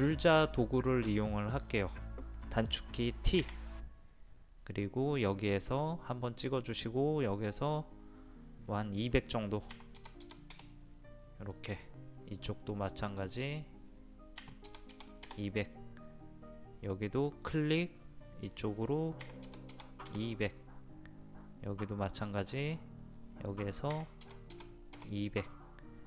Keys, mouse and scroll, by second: 3.4 t, 5.1 click, 9.7 KP_2, 10.0 KP_0, 13.0 click, 14.4 KP_2, 14.7 KP_0, 17.5 click, 19.2 KP_2, 19.5 KP_0, 22.0 click, 23.9 KP_2, 24.2 KP_0.